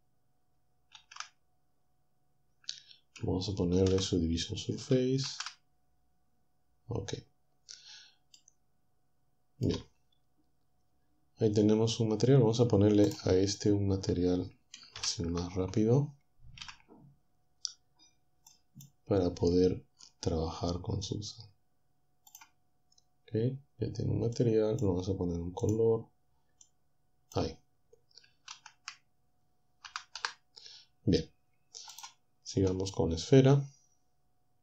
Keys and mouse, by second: 4.4 ctrl+3, 5.2 z, 15.0 ctrl+Down, 16.6 z, 22.3 click, 24.4 click, 25.6 click, 26.7 click, 28.6 shift+z, 29.9 typing.